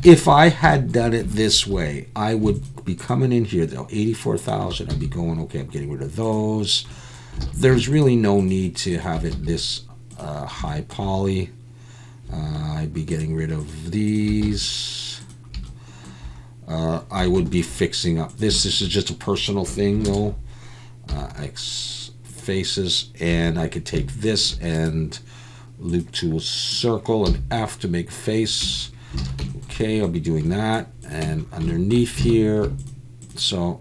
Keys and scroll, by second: 1.7 2, 6.4 x, 7.4 alt+a, 9.3 x, 14.4 x, 17.2 1, 20.1 ctrl+KP_Add, 21.1 x, 23.3 2, 27.3 f, 28.7 Tab, 29.2 alt+a, 31.3 Tab, 32.3 alt+a.